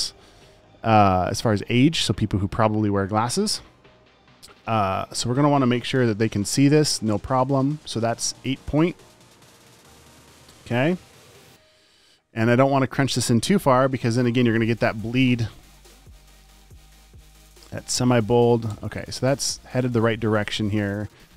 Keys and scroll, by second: 6.4 8, 9.9 super+a, 11.3 alt+super+Left, 14.3 super+z, 17.0 super+a, 19.4 v, 20.3 Escape.